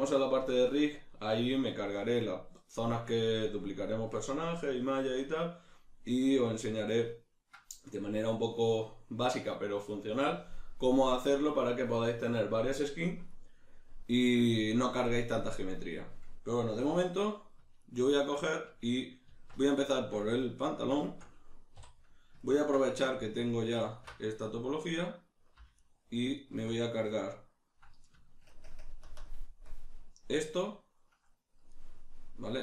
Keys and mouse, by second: 17.8 ctrl+middle click, 19.3 Tab, 20.0 shift+middle click, 21.0-23.4 shift+middle drag, 21.8 3, 23.4 alt+right click, 23.8 alt+shift+right click, 25.8 alt+shift+right click, 26.4 alt+shift+right click, 27.2-32.6 ctrl+middle drag.